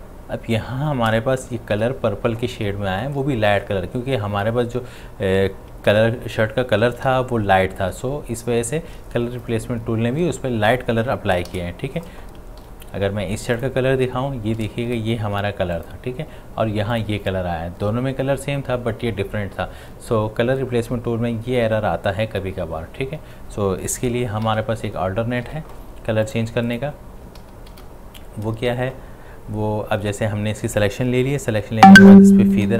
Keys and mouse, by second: 1.8 ctrl+d, 5.9 ctrl+z, 7.2 ctrl+z, 11.5 ctrl+shift+z, 12.6 ctrl+d, 13.6 click, 15.3 v, 15.8 click, 24.5 ctrl+z, 25.5 v, 26.2 click, 27.4 ctrl+z, 32.2 ctrl+z, 32.5 shift+F6.